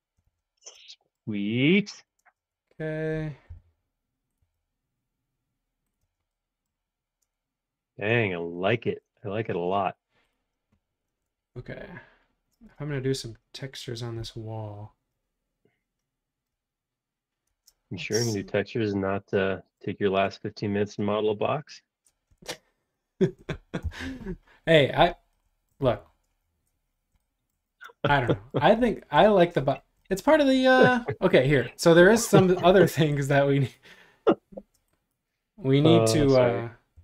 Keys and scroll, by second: 0.2 shift+z, 0.8 space, 2.2 space, 2.4 Home, 3.6 m, 6.0 space, 11.4 super+Tab, 12.5 super+Tab, 17.5 super+Tab, 23.8 Delete, 36.9 shift+s.